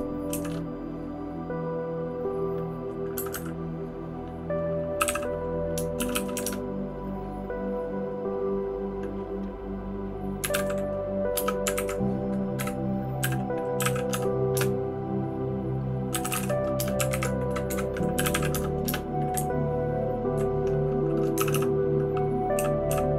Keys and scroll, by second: 0.3 $, 3.3 Escape, 4.7-5.5 typing, 19.8-20.3 Down, 21.3 }, 21.5 }, 22.5 {, 22.9 {.